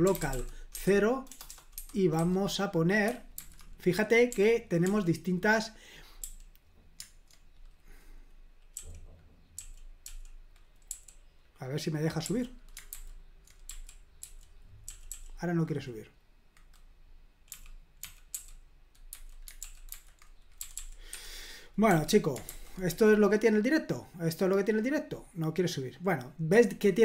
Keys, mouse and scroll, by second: 0.0-2.2 typing, 3.4 super+h, 4.3-4.8 typing, 6.2 i, 8.7 k, 9.6 k, 10.9 u, 12.9 super+h, 13.7-15.1 typing, 17.3-19.1 typing, 19.6 super+l, 19.9 super+h, 20.6 typing, 21.1 Escape, 21.9 typing, 22.5 super+h, 23.7-25.2 scroll up 1, 26.6 click.